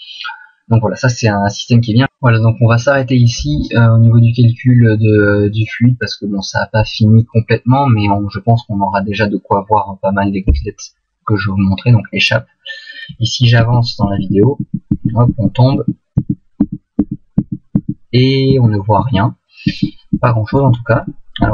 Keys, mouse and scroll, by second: 10.4 Escape, 13.6 Right, 14.0 Right, 14.3 Right, 14.6 Right, 14.9 Right, 15.3 Right, 15.8 Right, 16.2 Right, 16.6 Right, 17.0 Right, 17.4 Right, 17.8 Right, 18.5 Right, 19.0 Right, 19.7 Right, 20.2 Right, 20.5 Right, 21.0 Left.